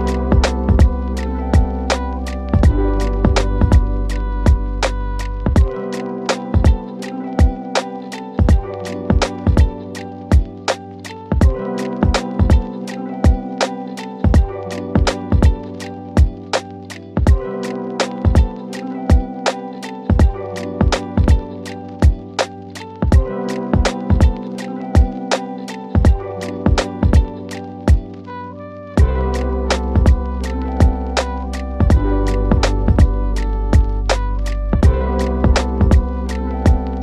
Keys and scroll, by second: 1.7 F3, 2.1 Escape, 23.4 KP_Add, 30.5 KP_Add.